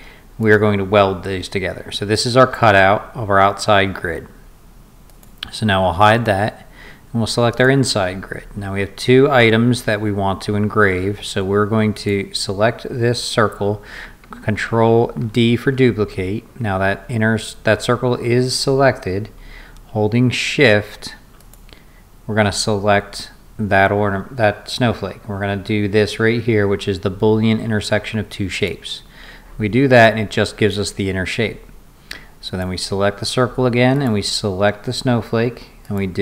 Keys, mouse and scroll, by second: 0.4 click, 5.1 click, 6.1 click, 7.5 click, 11.9 click, 15.2 ctrl+d, 21.4 shift+click, 28.5 click, 32.4 click, 33.9 shift+click, 35.9 click.